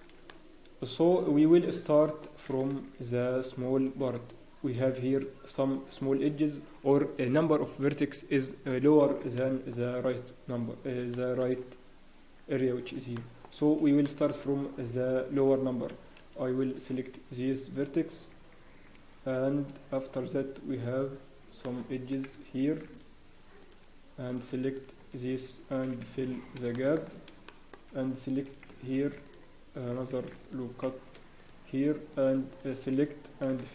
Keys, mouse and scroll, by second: 2.9 ctrl+r, 9.4 shift+middle click, 10.1 scroll down 1, 11.1 shift+middle click, 13.1 shift+middle click, 13.5-13.8 scroll up 1, 14.0 shift+middle click, 16.1 click, 16.1-16.4 scroll up 2, 16.6 shift+click, 18.3 f, 19.0 f, 19.4 scroll down 1, 19.6 scroll up 1, 20.7-21.0 scroll down 1, 21.6 shift+middle click, 21.9 scroll down 6, 22.6 ctrl+r, 24.3 click, 24.7 shift+click, 24.7 scroll up 2, 26.4 scroll down 1, 26.7 shift+middle click, 27.0-27.3 scroll down 3, 27.4 shift+middle click, 27.8-28.6 scroll up 5, 28.3 click, 28.9 ctrl+r, 32.1 click, 33.0-33.4 scroll down 1, 33.6 f.